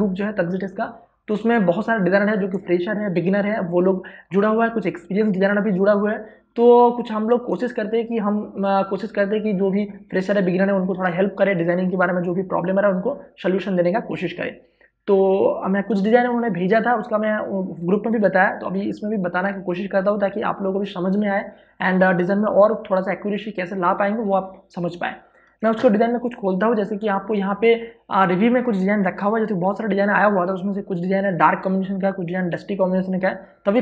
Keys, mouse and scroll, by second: 25.6 ctrl+o, 27.0 click.